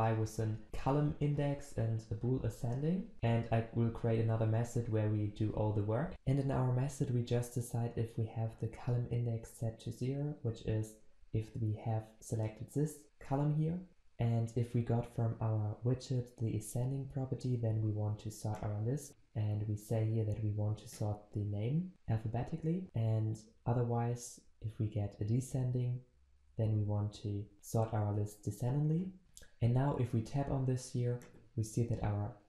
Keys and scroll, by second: 3.1 ctrl+alt+Left.